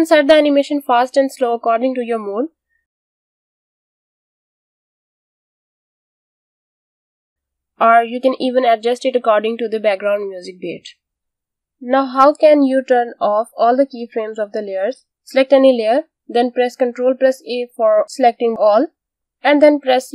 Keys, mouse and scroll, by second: 6.6 space, 7.1 click, 10.9 click, 11.7 click, 12.3 space, 12.8 click, 14.0 ctrl+Num_Lock, 14.3 ctrl+a, 15.3 click, 16.4 ctrl+a, 19.8-20.1 typing.